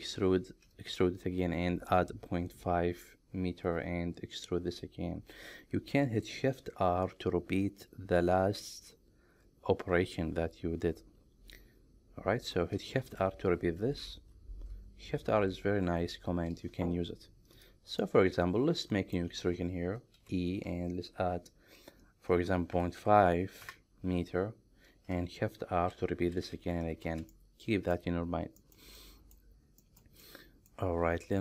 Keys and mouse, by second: 13.2-16.2 typing, 18.2-19.2 middle drag, 20.2 e, 22.8 KP_Decimal, 23.0 KP_5, 23.7 KP_Enter, 25.8-26.8 typing, 27.4 middle click, 28.6 shift+middle click, 29.0 middle click, 29.9 shift+middle click, 30.3 middle click.